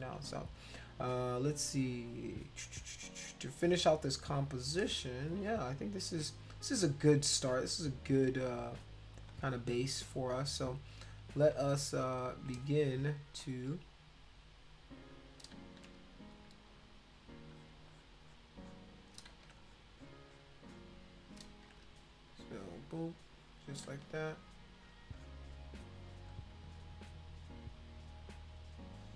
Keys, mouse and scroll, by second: 4.6 space, 4.8-6.0 drag, 8.1 click, 8.7 shift+click, 9.3 shift+click, 11.3 click, 12.0 shift+click, 12.8 click, 13.4 shift+click, 14.3 click, 15.6 ctrl+z, 16.1 click, 16.9 click, 17.5 click, 17.9 click, 18.3 click, 18.6 click, 19.3 ctrl+z, 19.6 click, 19.9 click, 20.2 click, 20.7 click, 21.5 ctrl+z, 21.8 click, 22.3 click, 22.7 click, 22.9 click, 23.3 click, 23.9 ctrl+z, 24.3 click, 25.1 click, 25.9 click, 26.3 click, 26.5 click, 26.6 click, 28.0 click, 28.4 click, 28.9 click.